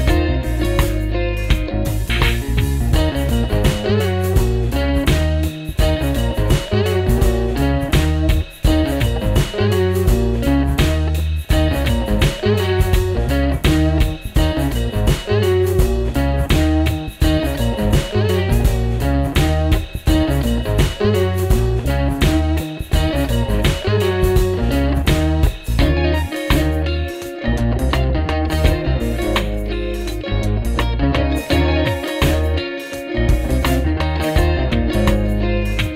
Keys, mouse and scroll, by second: 1.9 alt+BackSpace, 3.1 ctrl+d, 5.0 ctrl+0, 13.5 double click, 17.3 double click, 18.9-20.4 typing, 28.1 Delete, 29.5 alt+Tab, 31.2 double click, 31.8 alt+Tab.